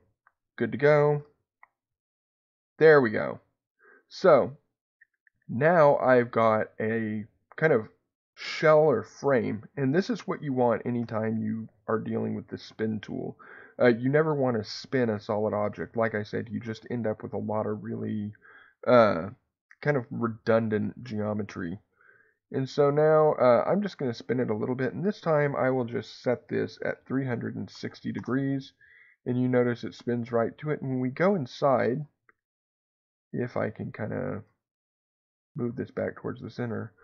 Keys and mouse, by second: 1.1 x, 5.2 middle click, 12.5 click, 17.4-18.5 middle drag, 20.0-24.2 drag, 25.0-28.9 drag, 32.5 middle click, 34.6 shift+middle click.